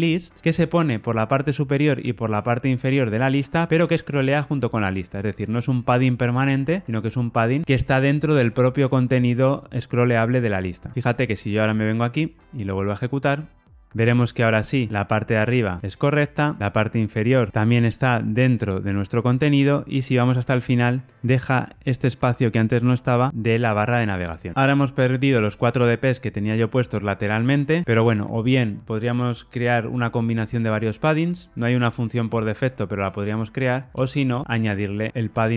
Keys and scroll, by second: 10.9 ctrl+r, 34.4 alt+shift+Left.